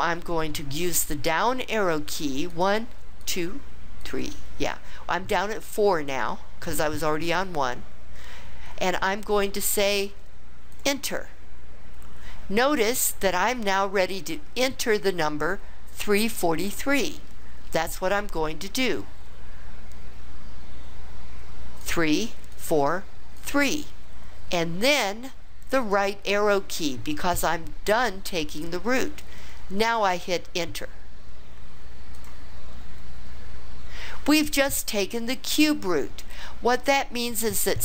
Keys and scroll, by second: 2.5 Down, 3.2 Down, 4.0 Down, 10.7 Return, 21.8 3, 22.5 4, 23.4 3, 25.8 ), 32.1 Return.